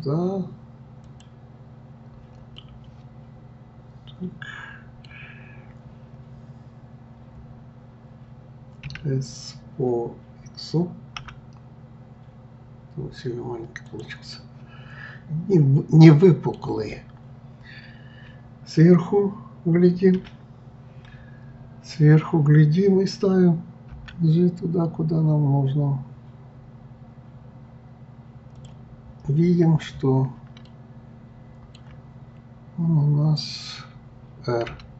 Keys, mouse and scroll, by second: 2.5-5.6 middle drag, 6.1-6.4 scroll up 2, 7.4-7.7 scroll down 1, 8.8 s, 14.3-17.3 middle drag, 20.1 KP_7, 29.0 scroll up 1, 30.6-33.6 shift+middle drag.